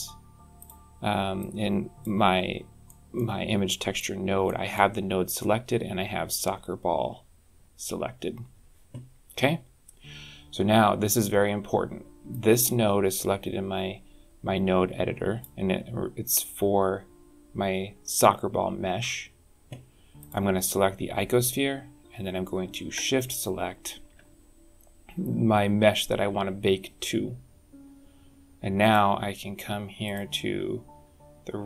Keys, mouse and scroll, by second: 1.3 click, 2.1-2.7 scroll up 8, 2.7 middle click, 3.6 click, 4.3 middle click, 10.1 scroll down 3, 10.4 scroll up 2, 10.8 scroll down 1, 12.2 click, 20.0 click, 23.1 shift+click, 28.7 click, 29.9 click.